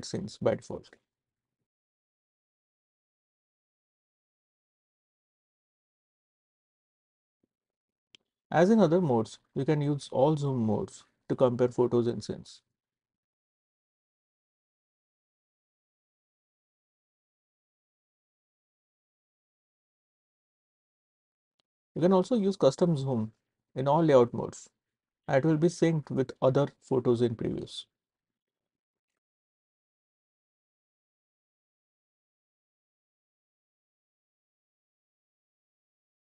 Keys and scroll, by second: 2.7 s, 3.9 w, 4.6 w, 6.7 s, 12.7 c, 14.9 space, 16.5-18.7 typing, 20.0 space, 22.0 c, 23.8 scroll, 25.0 scroll, 27.7 scroll, 27.9-28.3 scroll up 2, 29.0 scroll down 1, 35.7-36.2 scroll down 2.